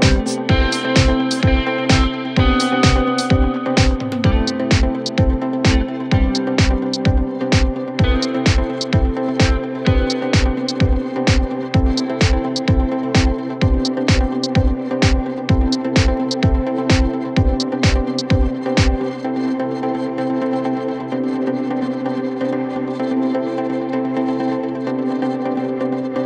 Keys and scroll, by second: 0.0-2.9 typing, 4.7 d, 5.6 ctrl+k, 15.2 F3, 15.5 Escape, 19.7 shift+Home, 19.8-20.8 typing.